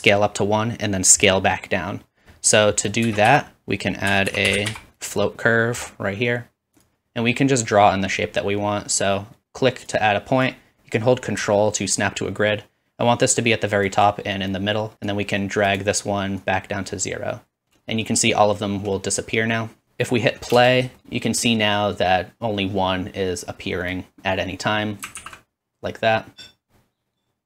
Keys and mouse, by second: 3.0 shift+a, 6.1 click, 6.9-9.4 middle drag, 7.1 typing, 9.4-25.1 drag, 20.6 space, 25.2 alt+z.